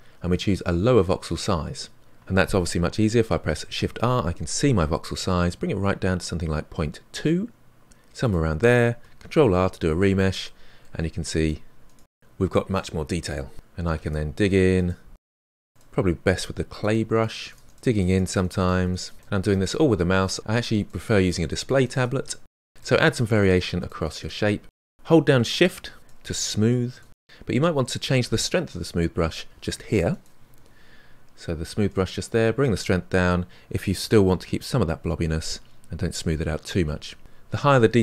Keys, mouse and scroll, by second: 3.7 shift+r, 9.2 ctrl+r, 10.0 middle click, 10.5-12.1 drag, 12.1 middle click, 13.8 f, 14.1 middle click, 14.5-16.5 ctrl+drag, 16.5 middle click, 16.6-18.6 drag, 18.6 middle click, 19.1-20.3 drag, 20.3 middle click, 20.6 ctrl+click, 20.9 shift+middle click, 21.6 click, 22.2 shift+middle click, 22.5-25.0 drag, 25.0 middle click, 25.5 scroll down 1, 25.8 shift+click, 26.3 middle click, 26.7-36.4 shift+drag, 37.7 middle click.